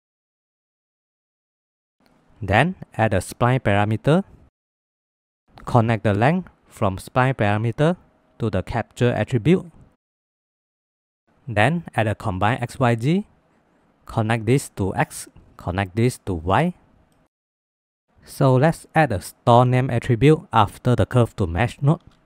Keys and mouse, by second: 0.6 drag, 0.9 middle click, 1.3 middle click, 1.6 ctrl+s, 2.8 click, 3.1 middle click, 3.3 shift+a, 3.8 BackSpace, 5.9-8.0 drag, 8.3 click, 8.4-10.0 drag, 10.2 middle click, 11.5 shift+a, 13.7 click, 14.0-15.2 drag, 15.3-16.4 drag, 17.1 ctrl+s, 17.7 middle click, 18.2 shift+a, 21.9 click.